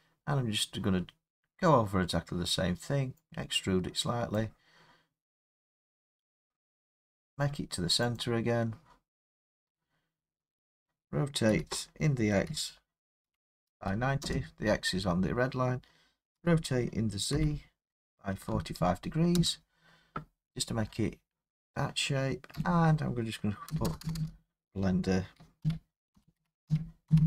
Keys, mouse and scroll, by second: 1.2 middle click, 1.2 middle click, 4.3 click, 7.1 click, 8.2 click, 11.5-13.7 typing, 14.2 Return, 15.1 typing, 16.1-19.4 typing, 22.5 Tab, 23.7 BackSpace, 23.9 BackSpace, 24.0 BackSpace, 24.2 BackSpace, 25.6-27.2 typing.